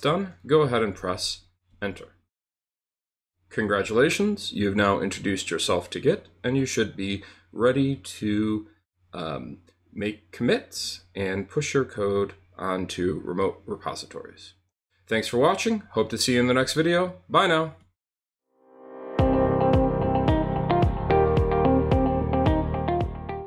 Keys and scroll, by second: 1.7 Return.